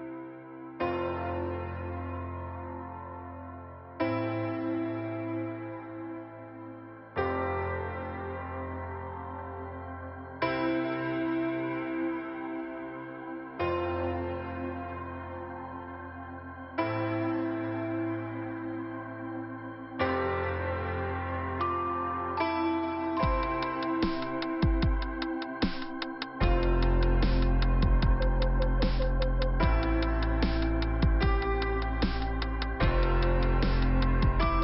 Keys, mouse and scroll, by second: 0.5 click, 0.6 click, 1.0-1.7 scroll down 1, 1.8 scroll down 1, 2.3 middle click, 4.3 middle click, 5.2 click, 5.3 click.